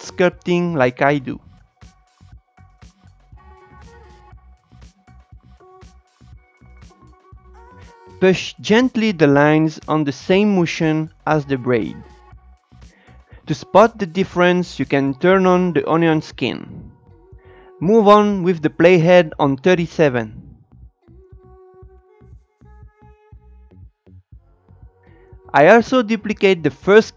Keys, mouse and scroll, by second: 2.2-3.9 drag, 3.9 scroll up 5, 4.1 shift+middle click, 4.3-5.4 shift+drag, 5.4-6.0 scroll down 6, 5.5 shift+middle click, 5.6 click, 6.0 click, 6.1 scroll up 7, 6.3 shift+click, 6.5 scroll down 2, 6.6 click, 7.5 shift+middle click, 7.6 scroll up 2, 7.7 click, 8.5 scroll up 1, 8.6-11.8 drag, 11.8 Tab, 12.3 click, 12.4 Tab, 12.5 Tab, 12.7-13.8 drag, 13.8 shift+middle click, 13.9 click, 14.2 Tab, 14.6 z, 14.9 Tab, 15.1 space, 15.4 Tab, 15.6 click, 16.4 scroll down 2, 16.5 shift+middle click, 16.7 Tab, 17.1-18.1 drag, 18.1 shift+middle click, 18.2 scroll up 1, 18.3 click, 18.3 Tab, 18.8 Tab, 18.9 click, 19.8 shift+middle click, 19.8 click, 20.2 shift+middle click, 20.4-23.9 shift+drag, 23.9 scroll up 1, 24.0-25.5 drag, 26.1 shift+d.